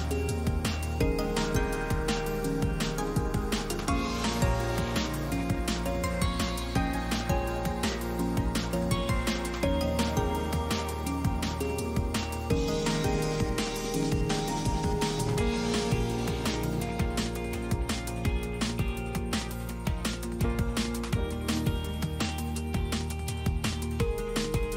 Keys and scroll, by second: 0.6 F4, 6.8 ctrl+z, 9.0 ctrl+z, 9.3 ctrl+z, 11.0 ctrl+z, 24.6 Delete.